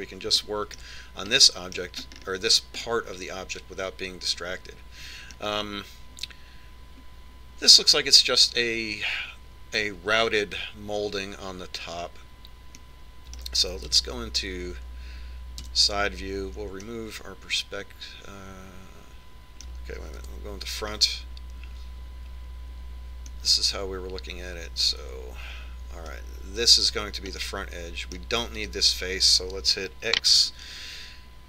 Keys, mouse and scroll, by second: 1.7-5.9 middle drag, 14.2-15.3 middle drag, 15.3 KP_3, 17.1 KP_5, 18.2-20.2 middle drag, 21.7 KP_1, 24.8-26.6 middle drag, 28.9-30.6 middle drag, 30.1 right click.